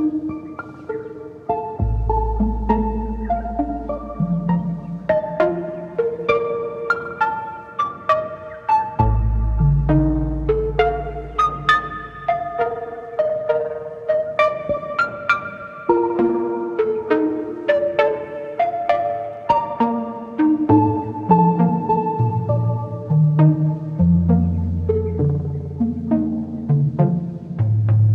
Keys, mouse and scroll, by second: 0.2 Tab, 0.4 Tab, 1.5-4.1 drag, 4.1-4.7 middle drag, 4.7 Tab, 6.0-6.3 drag, 6.4-9.4 drag, 9.6-10.0 scroll up 3, 10.1 shift+click, 10.4 shift+middle click, 11.6 shift+click, 12.7-15.0 drag, 16.9-18.1 drag, 19.1-19.5 scroll up 8, 19.6-21.7 shift+middle drag, 21.9 middle click, 22.1-22.6 scroll down 2, 22.6 click, 25.9 Tab, 26.2 Tab, 27.0 a, 27.8 a.